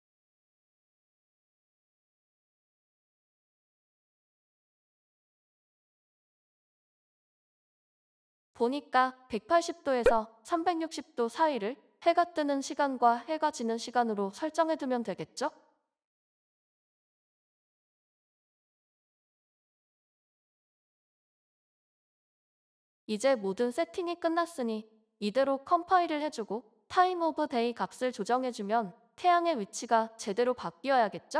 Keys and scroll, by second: 5.4 ctrl+s, 11.7 Right, 12.0-12.9 typing, 15.1 Right, 15.2-16.0 typing, 16.5 ctrl+s.